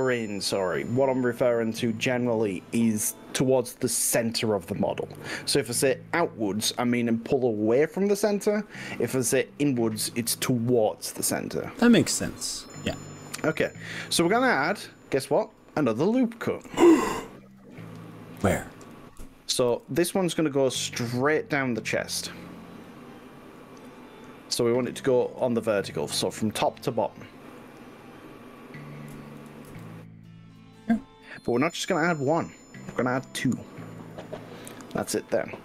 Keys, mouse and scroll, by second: 2.1 click, 2.3-17.7 middle drag, 18.1 click, 19.7 ctrl+r, 26.4-27.7 middle drag, 29.6 ctrl+r, 34.9 right click.